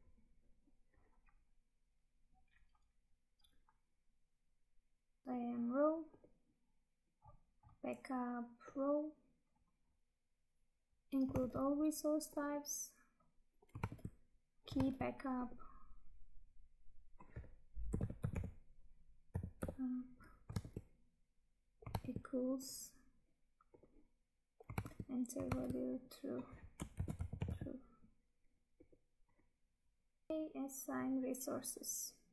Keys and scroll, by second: 5.2 Tab, 10.9 Tab, 11.5 Tab, 14.0 Tab, 20.7 Tab, 22.1 Tab, 24.9 Tab, 30.3 Tab.